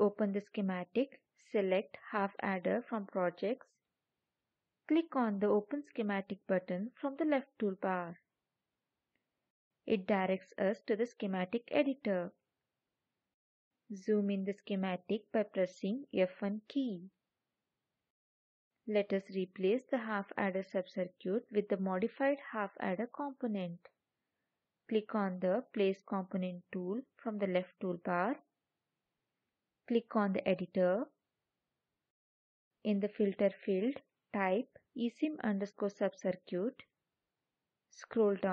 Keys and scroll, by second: 15.7 F1.